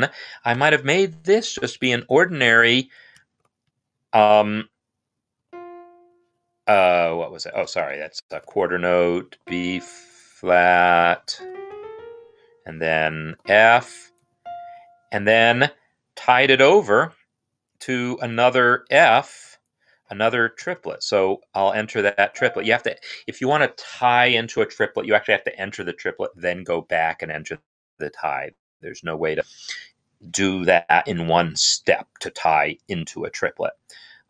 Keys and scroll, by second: 0.3 ctrl+Up, 2.9-3.7 typing, 7.4-8.1 typing, 11.0-11.8 typing, 13.1 Up, 13.8-14.6 typing, 20.0 5, 20.5 ctrl+3, 22.0 f, 34.1 5.